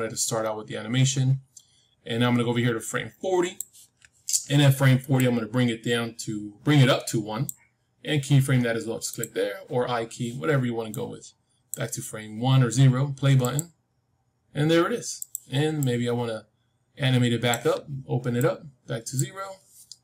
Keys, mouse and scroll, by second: 5.1-7.4 drag, 9.0-12.8 drag, 13.4-17.8 drag, 18.3-20.0 drag.